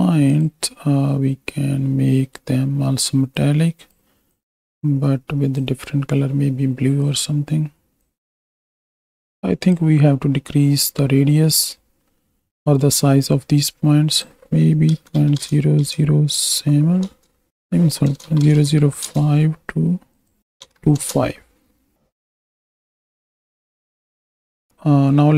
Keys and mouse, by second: 3.4 click, 8.2 click, 8.8 alt+a, 11.4 middle click, 12.4 middle drag, 14.1-17.1 drag, 17.6-19.1 drag, 18.5 KP_0, 20.2 click, 22.3 ctrl+space, 22.7 shift+drag, 22.9 z, 23.4 z, 23.7-24.1 drag, 24.7 ctrl+space.